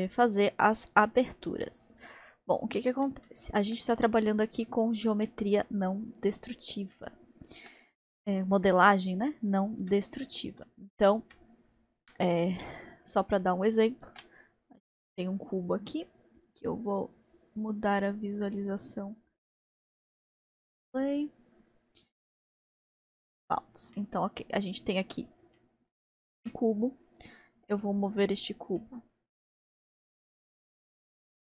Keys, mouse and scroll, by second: 0.0 n, 0.4-9.6 middle drag, 9.6-10.2 shift+drag, 10.3 shift+click, 11.1-12.6 shift+right drag, 12.6 shift+a, 14.1 shift+a, 14.1 shift+a, 16.0 click, 18.8 click, 19.5-20.9 drag, 20.9-21.4 scroll down 2, 21.9-24.0 drag, 24.0-26.4 middle drag, 26.4 g, 28.8-30.3 middle drag, 30.3 click, 31.2 g.